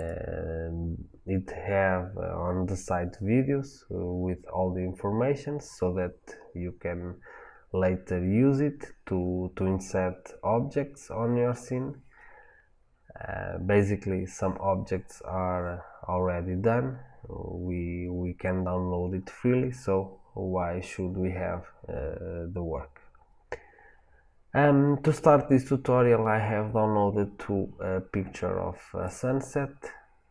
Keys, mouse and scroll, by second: 8.8-30.3 middle drag.